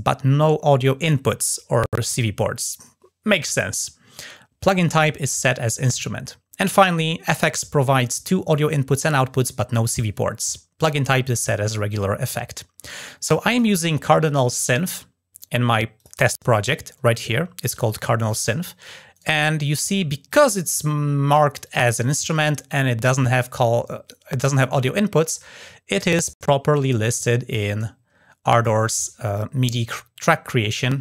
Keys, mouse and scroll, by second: 7.6-8.0 scroll down 2, 12.8 click, 15.7 click, 18.0-18.4 scroll down 1, 18.9 right drag, 20.1 click, 21.4 click, 22.1-28.4 drag, 30.4 click, 30.7 click.